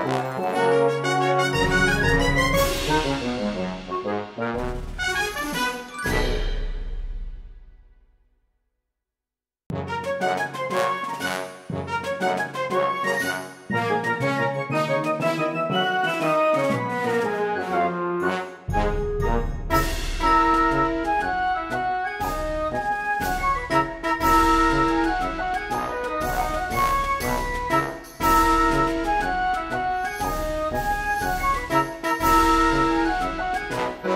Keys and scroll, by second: 6.9 ctrl+z, 7.9 space, 9.9 space, 10.4 space, 12.4 space, 13.8 space, 15.0 space, 19.6 space, 25.0 space, 26.4 space, 26.9 space, 28.2 space, 29.2 space, 30.1 space, 30.6 space, 32.4 ctrl+z, 33.4-34.1 typing.